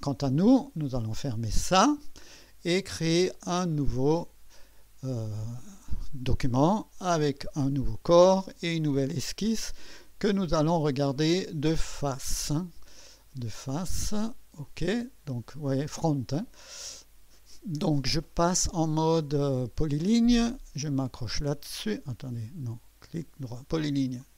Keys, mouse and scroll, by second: 0.0-1.3 drag, 1.7 click, 2.1-4.0 drag, 7.2 click, 9.4 click, 12.3 click, 14.6 click, 17.0-19.5 right drag, 19.5 click, 21.3 click, 24.2 click.